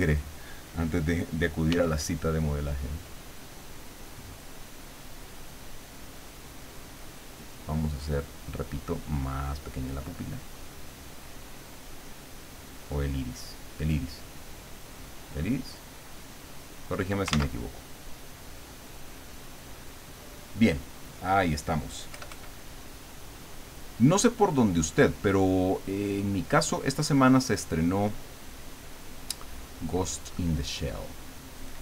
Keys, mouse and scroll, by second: 1.7 f, 2.7 click, 3.7-17.0 drag, 17.3 ctrl+z, 17.8 ctrl+click, 18.7-20.3 drag, 21.1 middle click, 22.1 KP_Add, 22.7 middle click, 25.7 click, 26.7 click, 30.0 click.